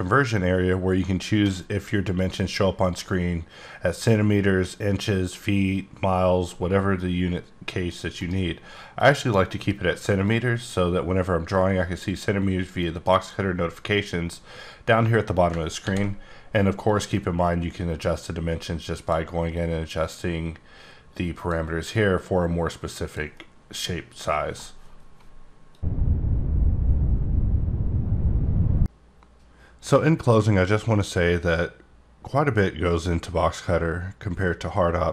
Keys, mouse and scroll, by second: 6.9 click, 8.2 right click, 9.0 click, 10.2 click, 13.1 right click, 15.8 ctrl+d, 16.9 click, 19.5 click, 21.9 click.